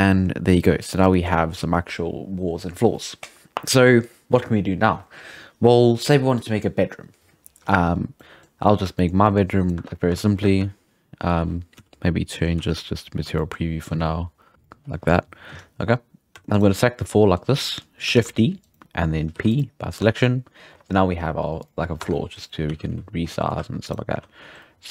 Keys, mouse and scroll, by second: 1.5-3.7 scroll up 1, 7.6-8.0 scroll up 1, 8.0 scroll down 2, 8.2 middle click, 8.6 scroll up 1, 8.6-9.6 shift+middle drag, 9.6 right drag, 9.8 Tab, 10.9 Tab, 11.0 Tab, 11.8 z, 12.6 z, 13.3-14.5 shift+middle drag, 14.5 click, 15.1-15.5 scroll down 1, 15.5 scroll up 2, 15.8-16.3 scroll down 1, 16.3 3, 16.5 right click, 16.7-18.1 middle drag, 18.1 shift+d, 19.3 p, 20.0 Tab, 20.1-21.6 right drag, 21.6 click, 22.0 Tab, 22.1 middle click, 22.7 a, 22.9 z, 23.3 middle click, 23.6 2, 23.8 right click, 24.1 z.